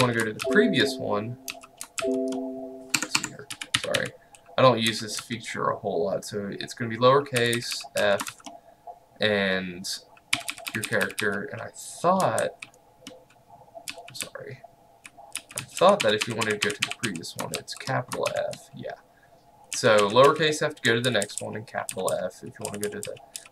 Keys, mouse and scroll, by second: 0.1 f, 0.5 shift+,, 1.6 f, 2.0 shift+,, 3.0 Escape, 3.6-4.9 typing, 7.2-9.0 typing, 10.4-11.2 typing, 12.4 typing, 13.7-18.4 typing, 19.6-23.5 typing.